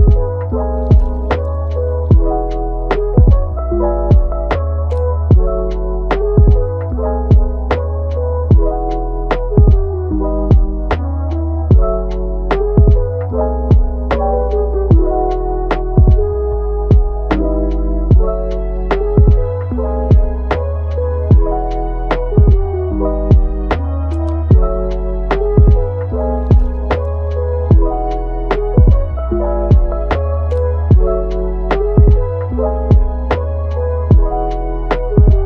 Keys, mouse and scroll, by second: 1.0-3.3 middle drag, 3.3 click, 3.8 g, 4.5 click, 6.2 click, 6.5 g, 7.4 middle click, 7.9 click, 8.2 g, 9.3 alt+s, 10.8-12.3 middle drag, 12.3 Tab, 12.7-14.1 middle drag, 14.1 click, 14.5 middle click, 15.1 Tab, 16.9 alt+s, 18.3-20.9 middle drag, 20.9 click, 21.7 g, 23.1-24.1 middle drag, 24.1 g, 27.5 ctrl+t, 29.5-30.9 middle drag, 30.9 g, 32.6-35.1 middle drag, 35.1 scroll up 1, 35.3-35.4 middle drag.